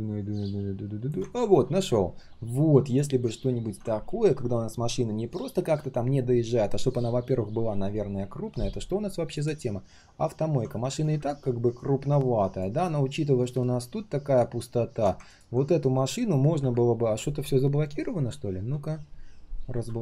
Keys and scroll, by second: 18.6 ctrl+alt+shift+l.